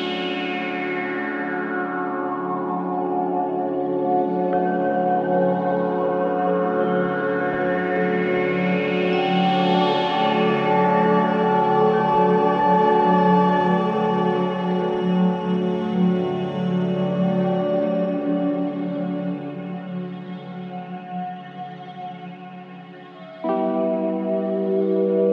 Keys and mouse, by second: 1.4 click, 2.5-6.8 drag, 8.2 click, 9.7 click, 10.7-11.4 typing, 11.7 Return, 13.8 click, 14.1 click, 15.1 click, 16.2 click, 17.8-18.2 typing, 18.5 Return, 20.2 i, 21.4 click, 21.7 space, 23.0 space, 23.6-24.8 drag.